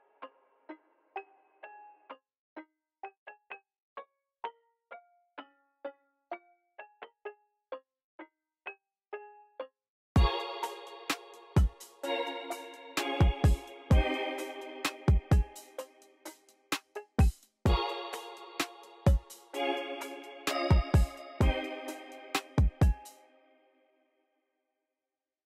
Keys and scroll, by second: 0.6 v, 1.1 x, 2.5 v, 2.9 x, 9.2-11.0 typing, 12.5 x, 15.2 x, 15.9 x, 21.3 x, 22.0 x, 22.6 space.